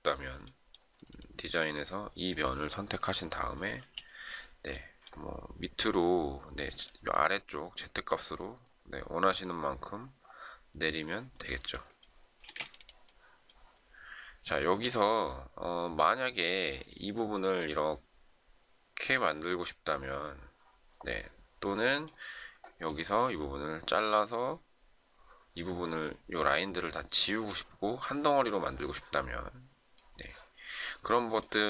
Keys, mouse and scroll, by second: 3.7 m, 12.4 space.